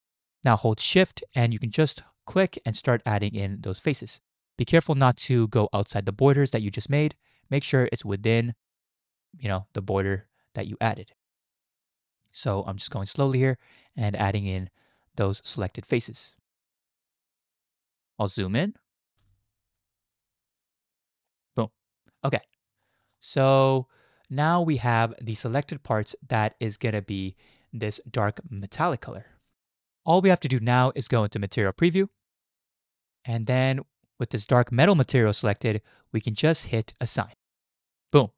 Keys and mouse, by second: 1.7-17.9 shift+drag, 18.6 shift+click, 19.4-21.5 shift+drag, 22.8 shift+click, 23.2-25.9 drag, 25.9 middle click, 29.5 middle click, 31.7 z, 37.3 click.